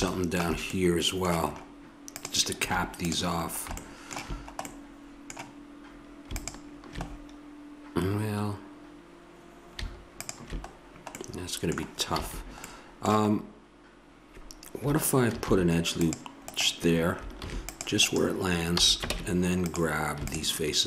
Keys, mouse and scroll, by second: 2.2-3.9 right drag, 2.6 Tab, 6.3-8.2 right drag, 11.2 middle click, 12.2 a, 15.3 ctrl+r, 17.4 ctrl+r, 18.8 a, 19.1 ctrl+Tab.